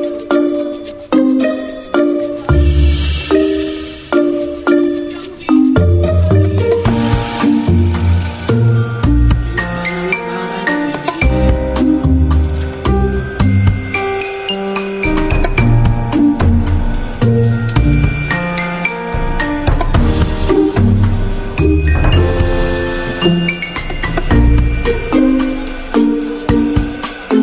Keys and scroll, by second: 1.5-2.2 typing, 12.3 ctrl+g, 23.8 v.